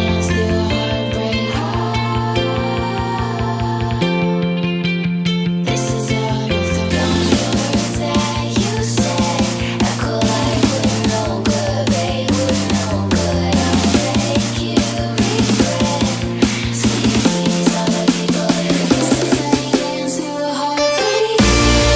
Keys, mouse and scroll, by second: 0.0-5.3 drag, 6.2-11.1 drag, 11.7 Return.